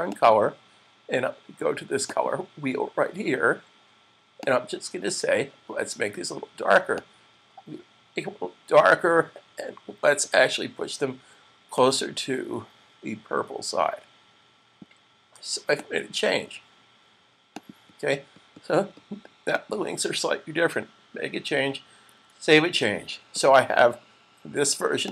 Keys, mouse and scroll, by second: 0.5 click, 6.9 click, 11.5 click, 15.9 click, 21.9 super+s.